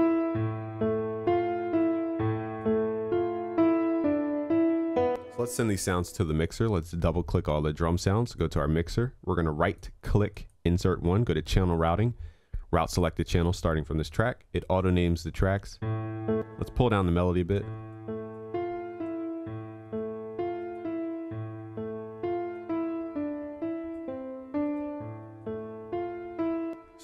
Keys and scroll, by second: 21.6 ctrl+s.